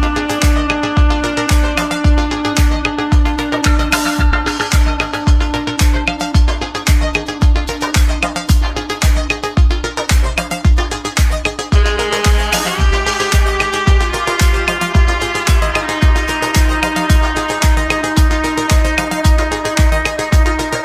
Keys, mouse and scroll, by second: 1.0 click, 2.1 click, 3.3 click, 4.5 click, 5.3-5.9 scroll down 4, 5.9 scroll up 2, 6.4-9.0 shift+middle drag, 9.2 click, 12.5-13.0 scroll down 1, 14.6 click, 18.6 click.